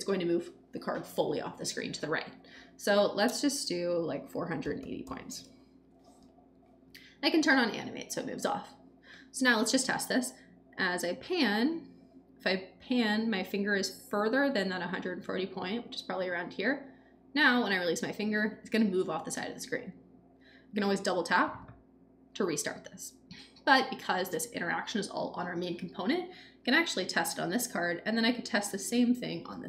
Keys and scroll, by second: 4.3-5.5 typing.